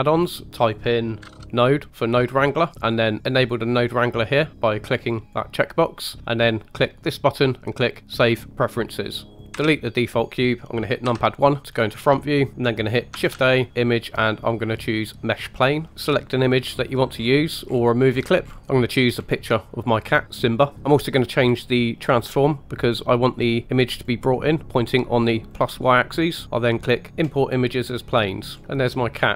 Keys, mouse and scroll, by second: 9.7 Delete, 11.0 KP_1, 11.6-12.0 scroll up 2, 12.2 shift+middle click, 13.1 shift+a, 28.4-29.1 scroll up 4, 28.6 shift+middle click.